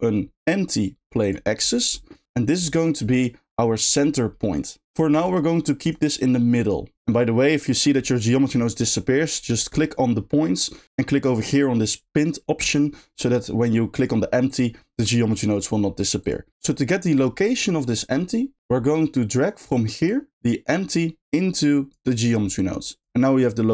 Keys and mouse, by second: 5.1 g, 5.8-6.9 right drag, 9.7 click, 12.6 click, 14.0 click, 14.5 click, 16.2 click, 20.1 click, 22.3 click.